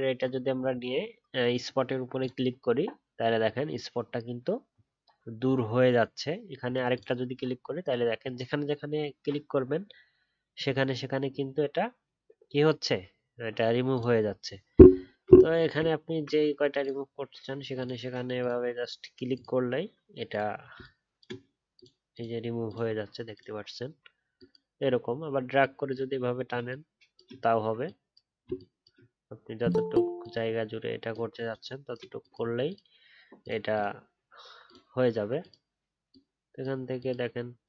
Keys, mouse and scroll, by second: 15.9 alt+scroll up 2.